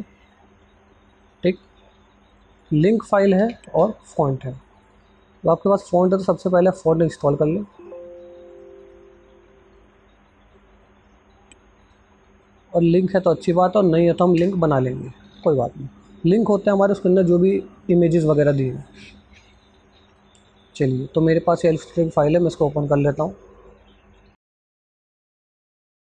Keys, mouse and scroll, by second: 1.2 click, 1.4 click, 3.7 BackSpace, 4.4 click, 6.2 right click, 7.4 click, 11.4 click, 11.5 BackSpace, 12.5 click, 14.2 BackSpace, 19.3 click, 22.3 right click, 24.2 click, 25.7 click.